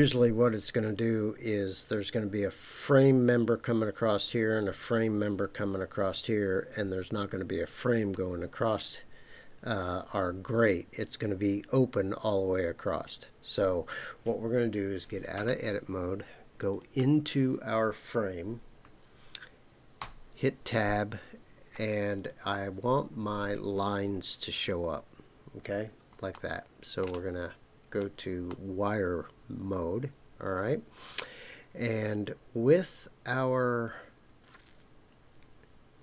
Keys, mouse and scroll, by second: 15.3 Tab, 16.7 click, 20.0 Tab, 23.6 click, 26.3 shift+middle click, 27.7-28.5 scroll up 2, 28.5-36.0 middle drag.